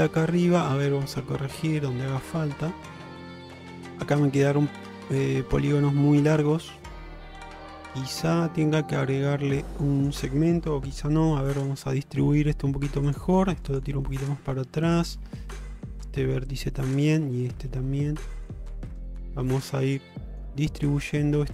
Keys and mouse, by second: 0.5 click, 1.7 click, 2.1 Tab, 2.9-4.1 middle drag, 4.7-5.2 middle drag, 6.0 middle click, 6.9-9.3 middle drag, 11.1 g, 12.0 middle click, 13.4 g, 14.1 middle click, 14.9 click, 15.2 g, 16.1 middle drag, 17.0 click, 17.2 g, 19.1 click, 19.4 g, 20.2 middle click, 21.1 click, 21.3 g.